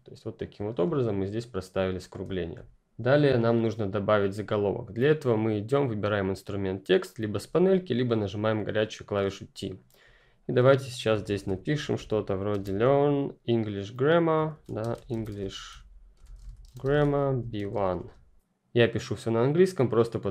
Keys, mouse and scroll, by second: 0.5 ctrl+click, 2.2-2.7 ctrl+scroll down 2, 6.9 click, 10.1 click, 11.2-12.5 typing, 14.2-17.9 typing.